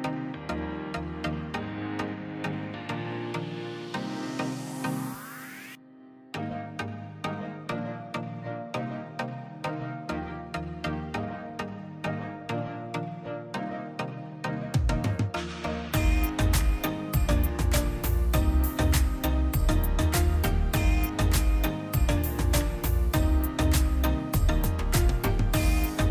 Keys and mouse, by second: 2.5 ctrl+shift+click, 3.8 click, 4.5 shift+a, 11.6 click, 12.0 click, 13.1 click, 14.3 click, 15.1 click, 15.7 click, 16.4 click, 17.3 shift+a, 21.0 click, 22.3-22.8 middle drag, 22.8-24.3 drag, 24.8-26.1 drag.